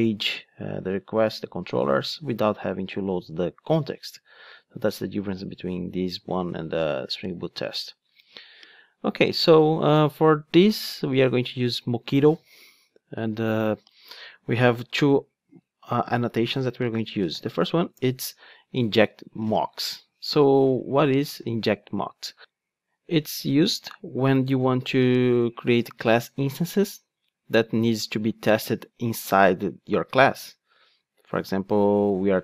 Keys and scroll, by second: 18.1 Return.